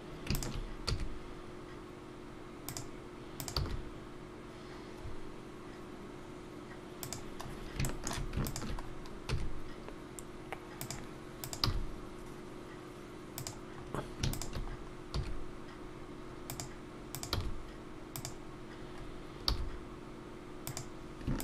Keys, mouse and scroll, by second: 0.3 shift+click, 0.9 shift+e, 3.4 click, 3.6 g, 7.5 scroll up 2, 7.8 shift+middle click, 8.5 shift+click, 9.3 scroll, 9.3 shift+e, 11.4 click, 11.6 g, 14.2 scroll up 2, 14.3 shift+click, 14.7 shift+click, 14.7 scroll down 1, 15.2 e, 17.1 click, 17.3 g, 18.9 scroll up 2.